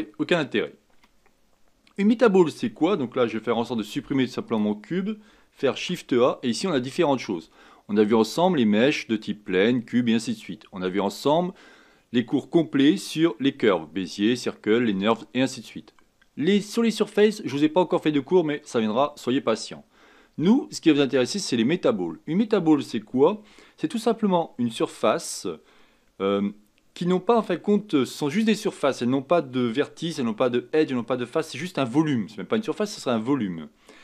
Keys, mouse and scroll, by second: 5.7 shift+a.